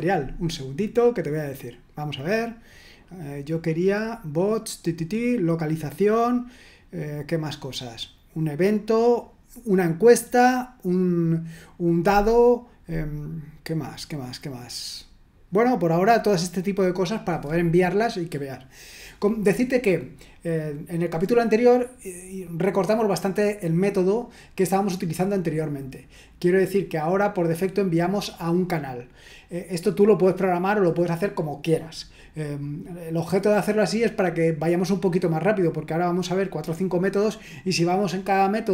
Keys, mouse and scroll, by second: 13.5-14.4 scroll down 1, 14.8-15.2 scroll down 1.